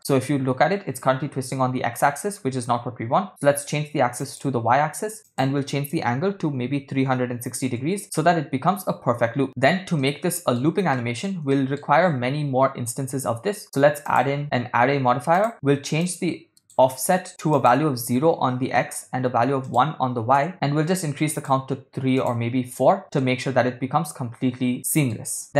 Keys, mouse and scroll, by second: 4.2 click, 5.3-7.8 drag, 10.1-10.5 shift+middle drag, 11.0 ctrl+middle drag, 11.5 shift+middle drag, 14.1-15.5 drag, 16.0 click, 17.6-18.7 drag, 19.7 click, 21.4 click, 22.2 click, 23.2-25.2 shift+middle drag.